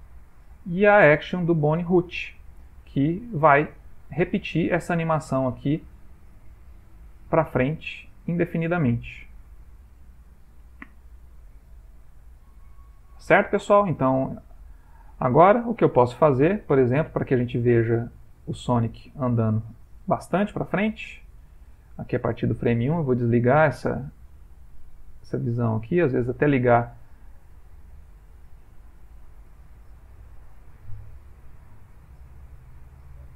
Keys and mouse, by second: 2.7 ctrl+middle click, 4.3 shift+middle click, 11.9 ctrl+middle click, 14.7 Escape, 15.7-16.3 ctrl+middle click, 15.8 ctrl+middle click, 16.3 middle click, 17.2-19.7 shift+middle click, 17.9 ctrl+middle click, 18.6 ctrl+space, 19.2 ctrl+middle click, 19.3 ctrl+middle click, 19.8 shift+middle click, 24.2 Right, 24.2 click, 26.2 click, 27.6 ctrl+middle click.